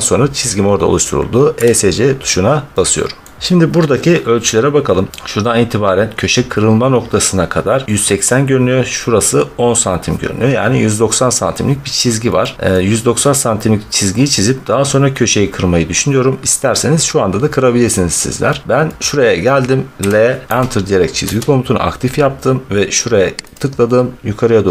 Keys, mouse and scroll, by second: 1.5 Escape, 3.1 middle click, 3.4 middle click, 4.4 middle click, 5.0 middle click, 12.3-14.2 scroll, 14.2-15.5 scroll, 18.5 middle click, 18.7 middle click, 19.0 scroll, 19.8 Return, 21.1 Caps_Lock, 23.4 click.